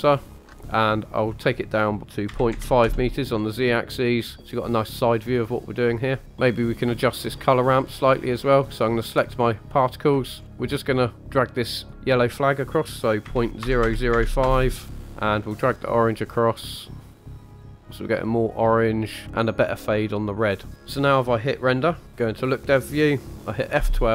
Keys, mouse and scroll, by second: 1.2-2.9 drag, 6.6 click, 8.8 click, 10.4 scroll up 5, 10.6 middle click, 11.2 click, 11.8-13.0 drag, 13.8 KP_0, 14.2 click, 15.9-17.7 drag, 18.2 click, 19.2 click, 22.0 click.